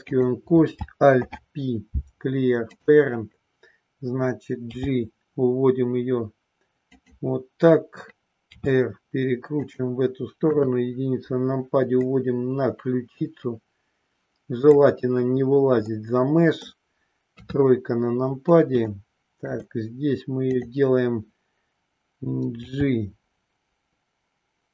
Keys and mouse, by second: 1.1 alt+p, 4.7 g, 8.4 r, 9.5 click, 10.4 KP_1, 12.1-14.5 drag, 15.9 middle click, 17.3 KP_3, 18.9 shift+middle click, 22.6 g.